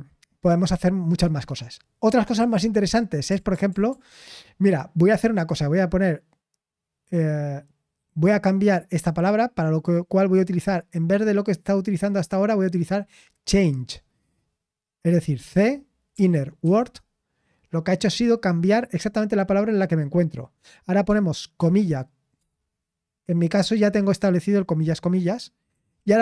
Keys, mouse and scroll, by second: 5.2 typing.